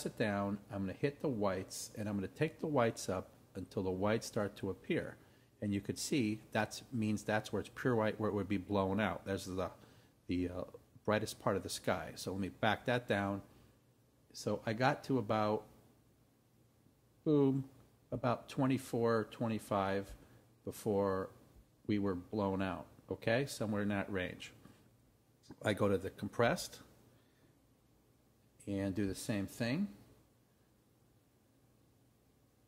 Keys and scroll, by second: 26.5 Right.